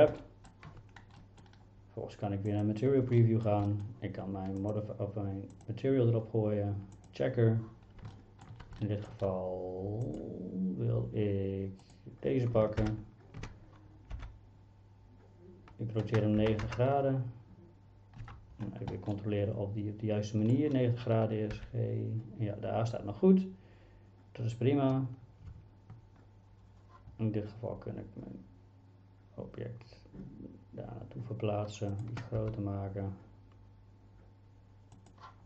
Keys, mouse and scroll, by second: 0.4 shift+middle click, 1.2 middle click, 2.5 click, 3.2 shift+middle click, 3.7 middle click, 4.7 click, 5.6-7.1 drag, 8.3 shift+middle click, 9.0 shift+middle click, 10.1 click, 11.8 click, 12.8 ctrl+l, 14.2 r, 16.4 KP_9, 16.7 KP_0, 18.2 Return, 19.1-20.5 middle drag, 21.6 g, 32.4 s.